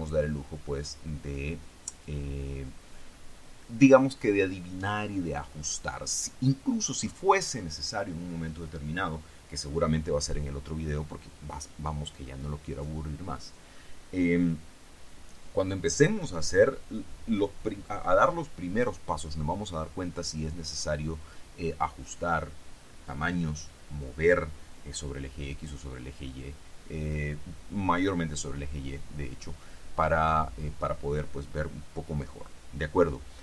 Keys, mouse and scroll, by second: 0.7-2.3 drag.